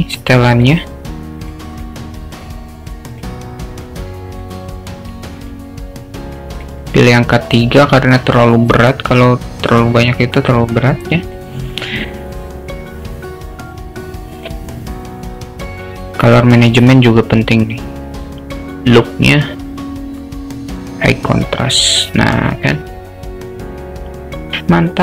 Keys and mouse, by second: 0.6 click, 1.5 drag, 1.8-2.5 drag, 3.1 click, 3.8 click, 4.3-5.5 drag, 6.6 click, 6.9 click, 14.0 click, 14.4 click, 15.8 click, 18.9-21.4 drag, 22.5 click.